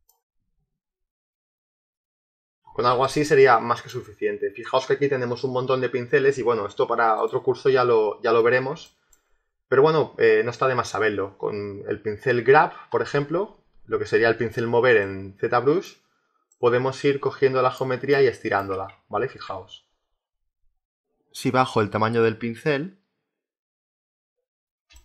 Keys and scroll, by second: 19.1 ctrl+z.